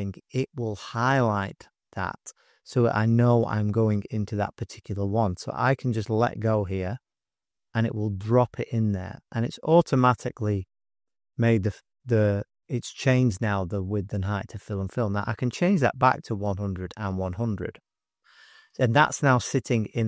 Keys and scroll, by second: 15.8-18.1 typing, 16.2 Tab.